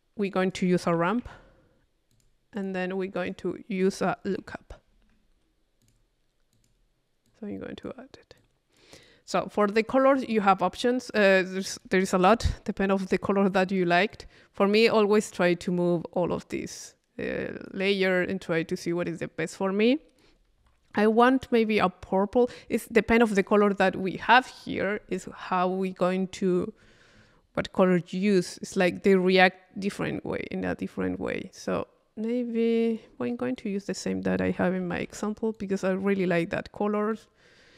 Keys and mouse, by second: 0.4 click, 0.6 Tab, 2.1 click, 3.2 click, 3.2 right click, 3.8 click, 5.8 click, 6.6 click, 7.3 click, 8.4 click, 10.4 click, 11.2-12.3 drag, 14.1 click, 15.2 click, 16.1-18.0 drag, 19.2-20.5 drag, 24.1-25.9 middle drag, 26.2-27.3 middle drag, 27.6-33.3 drag, 33.6-34.6 drag, 34.6 click, 35.6 click, 37.1-37.7 drag.